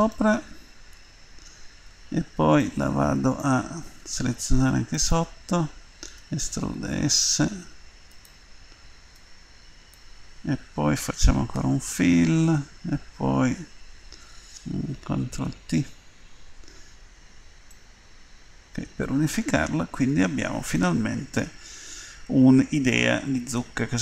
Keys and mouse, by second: 1.0 Tab, 1.9 Tab, 5.4-7.8 drag, 6.1 e, 9.1-11.5 drag, 11.5 f, 15.4 ctrl+t, 17.9 middle click, 19.2 middle click.